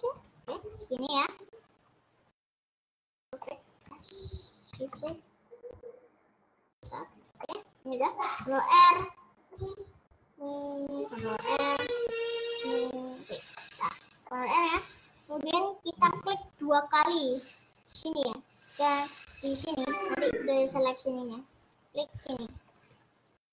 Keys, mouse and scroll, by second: 0.6-3.4 middle drag, 3.9 s, 7.3-8.7 middle drag, 8.7 ctrl+r, 11.5 ctrl+r, 13.8-15.5 middle drag, 15.5-16.7 drag, 19.5 click, 19.7 click, 22.8 click, 22.9 click.